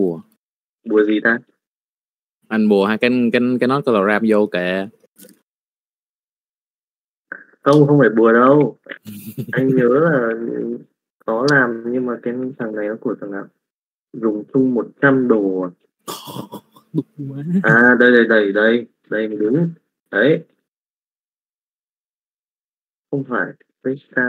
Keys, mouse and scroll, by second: 0.5 middle click, 1.3 g, 2.6 middle click, 3.1 Tab, 3.9 click, 4.1 middle click, 5.6 Tab, 5.6 middle click, 7.6 middle click, 8.1 middle click, 8.5 a, 9.1 alt+a, 9.8 click, 10.5 middle click, 10.8 g, 11.8 alt+a, 11.8 right click, 11.8 g, 12.3 middle click, 12.6 Tab, 15.7 middle click, 16.3 KP_Divide, 17.4 shift+middle click, 18.1 click, 18.4 middle click, 19.3 KP_Divide, 19.9 middle click, 20.3 middle click, 21.2 Tab, 21.2 click, 24.0 Tab.